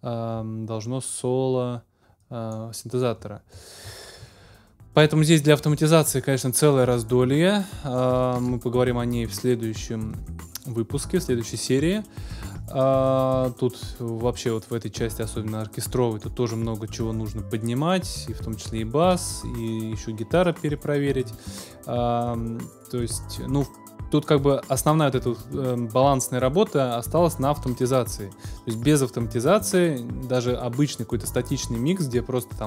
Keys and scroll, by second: 8.3 super+s, 27.7 super+s.